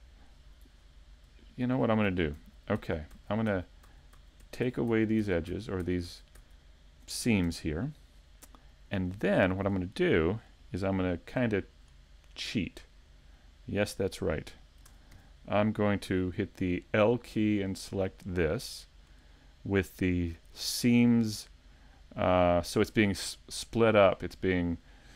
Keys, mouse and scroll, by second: 1.3 scroll up 3, 1.7 super+z, 4.2 super+z, 8.7 middle click, 8.7-9.1 scroll down 3, 10.9 shift+middle click, 10.9 scroll down 2, 14.9 ctrl+Tab.